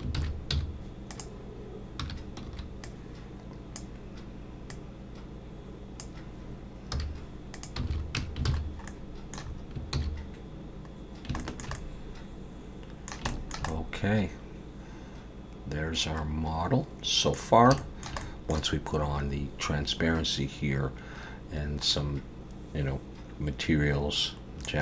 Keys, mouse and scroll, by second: 0.2 alt+a, 0.5 z, 2.5 1, 2.5 b, 4.7 click, 6.9 z, 7.9 alt+a, 8.2 Tab, 8.5 alt+a, 8.6 scroll down 3, 8.9 middle click, 10.7 ctrl+s, 11.1 scroll down 2, 11.4 shift+middle click, 11.8 middle click, 13.3 shift+middle click, 13.7 middle click, 17.8 shift+middle click, 18.2 middle click, 21.9 middle click.